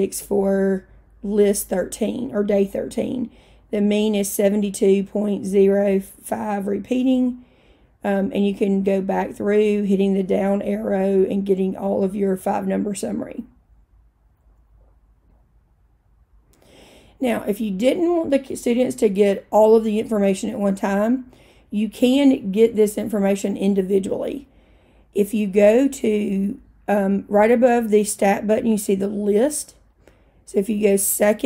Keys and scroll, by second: 10.5 Down, 10.7 Down, 10.9 Down, 11.2 Down.